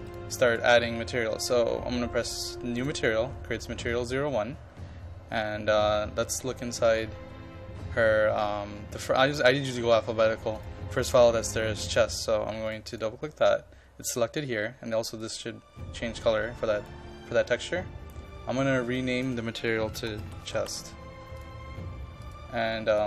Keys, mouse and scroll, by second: 13.0-17.7 drag, 19.9-21.1 typing, 21.4 click.